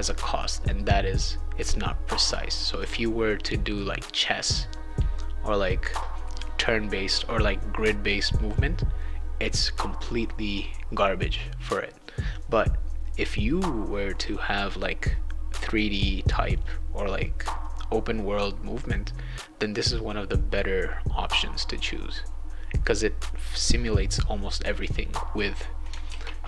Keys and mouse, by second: 26.1 ctrl+s.